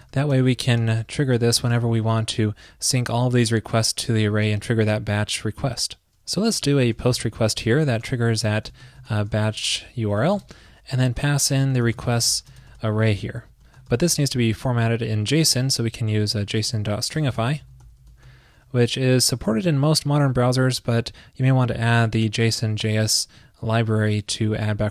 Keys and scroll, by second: 9.5 super+Right, 14.6 alt+Left, 18.9 alt+shift+Right, 22.8 super+Right.